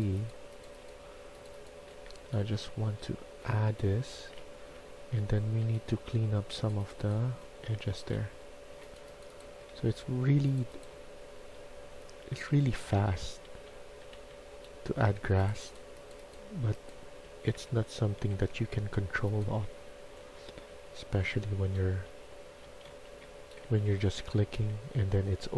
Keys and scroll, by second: 0.6 s, 1.6-2.7 typing, 4.0-5.4 typing, 7.0-9.6 typing, 10.8-14.2 typing, 16.9-17.7 typing, 19.1-20.6 typing, 21.8-25.5 typing.